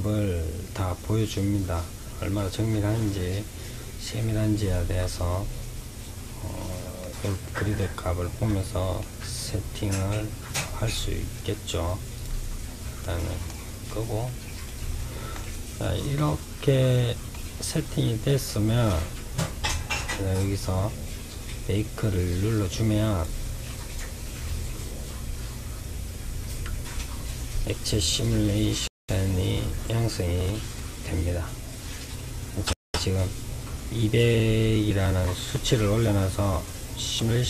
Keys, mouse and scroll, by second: 3.1-3.9 scroll up 5, 4.2-5.0 scroll up 8, 6.3-8.9 middle drag, 8.9-9.8 scroll down 5, 9.8-11.4 scroll down 14, 11.4 click, 12.4-21.0 middle drag, 21.8-23.2 drag.